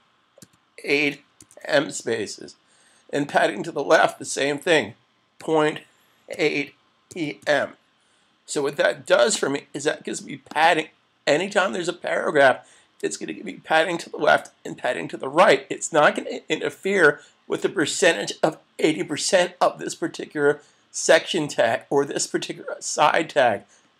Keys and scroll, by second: 12.8 super+s.